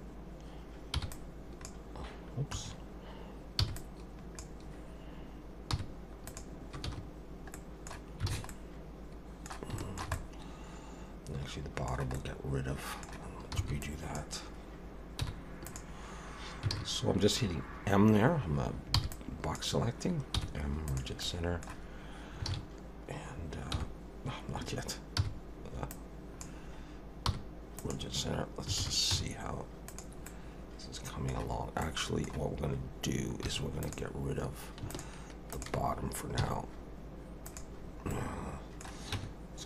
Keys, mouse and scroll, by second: 0.9 m, 3.6 b, 5.7 m, 6.9 a, 7.5 middle click, 8.3 alt+a, 8.5 middle click, 9.8 shift+middle click, 10.1 middle click, 12.1 middle click, 13.6 b, 15.2 m, 16.7 alt+a, 18.9 b, 20.4 m, 21.2 middle click, 22.5 alt+a, 23.7 m, 25.9 click, 27.3 m, 28.8 alt+a, 29.1 z, 30.3 middle click, 31.8 middle click, 33.5 3, 33.8 click, 34.9 shift+click, 35.5 click, 36.4 x, 37.8 scroll down 3, 38.1 middle click, 39.1 Tab.